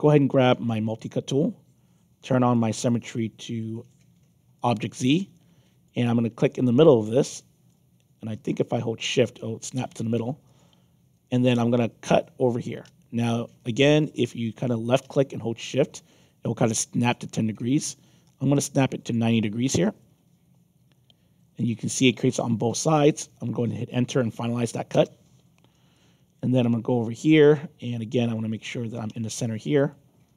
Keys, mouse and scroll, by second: 0.9 click, 2.5 click, 4.5 click, 5.3 alt+click, 7.3 alt+click, 10.4 shift+click, 14.8-19.1 shift+drag, 19.8-23.7 alt+drag, 24.9 Return, 25.9-27.2 alt+drag, 27.5 middle click, 29.7 shift+click.